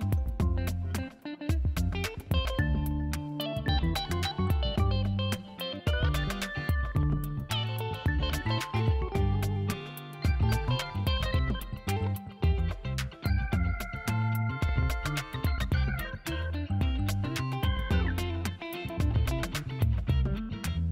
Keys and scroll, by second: 2.4 space, 4.7 space, 6.7-9.7 typing, 7.4 alt+space, 9.5 ctrl+alt+z, 12.6-15.5 typing, 15.0 alt+space, 17.6 ctrl+shift+BackSpace, 17.9 v, 18.1 space, 19.6 l.